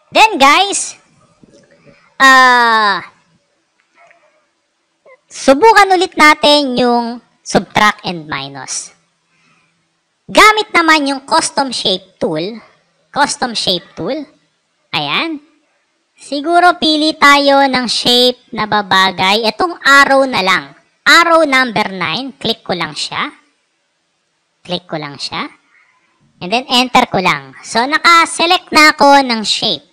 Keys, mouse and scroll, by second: 4.4 click, 4.8 right click, 12.2 click, 14.1 click, 17.4 scroll up 1, 17.6 scroll down 1, 21.9 click, 27.0 Return.